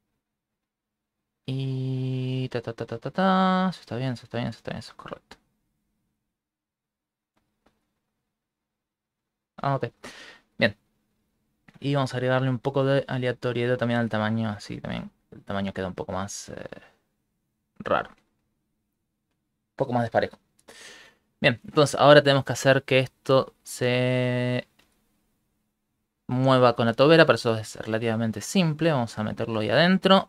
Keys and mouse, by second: 6.7 ctrl+middle click, 10.3 ctrl+middle click, 11.5 middle click, 11.7 middle click, 12.5 shift+click, 15.1 shift+click, 15.9 click, 17.1 click, 18.6 shift+middle click, 21.3 Escape, 22.1 shift+middle click, 23.0 click, 24.5 right click, 24.9 x, 25.6 right click, 26.1 click, 28.6 middle click, 30.1 middle click.